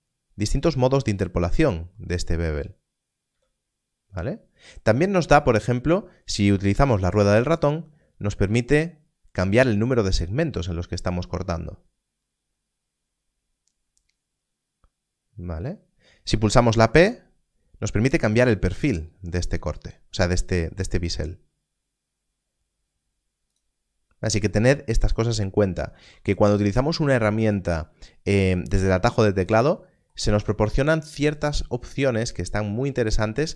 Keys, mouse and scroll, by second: 1.4 m, 7.5 m, 8.4-9.2 scroll up 1, 9.2-9.7 scroll down 1, 9.9-10.9 scroll up 1, 10.9-12.6 scroll down 1, 12.6-13.5 scroll up 1, 13.5-14.6 scroll down 1, 14.6-15.1 scroll up 1, 25.3 scroll down 1, 26.0 alt+a.